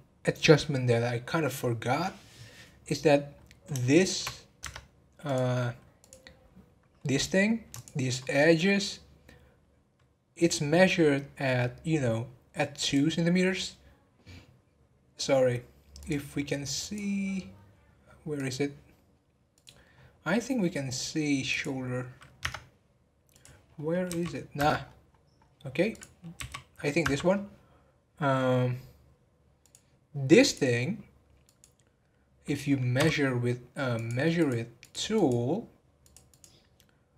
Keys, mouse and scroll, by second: 3.0-3.8 scroll up 4, 3.8 shift+middle click, 4.6 Tab, 5.2 click, 5.5-6.0 scroll up 1, 6.0 click, 7.7 shift+click, 12.8 click, 16.0 click, 16.8 click, 18.3 click, 19.5 click, 20.0 scroll down 2, 21.5 click, 23.3 click, 23.6-24.0 scroll down 9, 24.0 g, 24.8 scroll up 2, 25.3-25.9 scroll up 9, 25.9 click, 27.8-28.5 scroll down 1, 29.6 click, 30.4 click, 32.9 n, 33.9 click, 34.3 click, 34.8 click, 35.1 click, 36.0 click, 36.3 click.